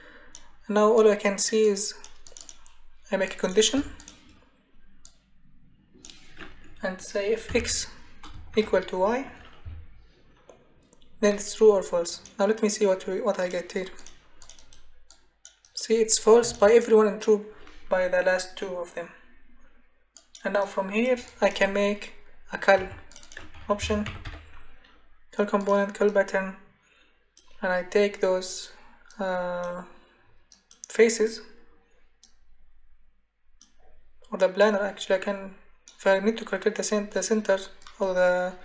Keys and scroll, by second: 3.8 BackSpace, 7.5 x, 8.5 shift+0, 9.6 y, 22.8 Delete, 23.5-24.7 typing.